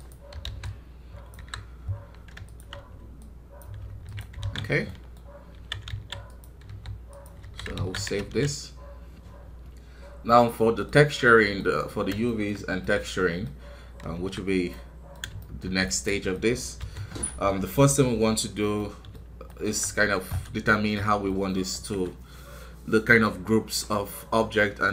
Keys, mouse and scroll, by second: 0.5 click, 1.3 KP_1, 1.7 scroll down 1, 2.4-3.8 shift+drag, 3.8 ctrl+Tab, 4.5 scroll down 1, 4.8 middle click, 5.1-5.5 scroll up 1, 5.5 a, 7.3 KP_1, 7.7 alt+a, 10.9 ctrl+s, 13.2 middle click, 14.1 KP_1, 14.6 middle click, 15.6-16.1 scroll up 1, 16.1 middle click, 16.7 n, 18.7-24.2 middle drag.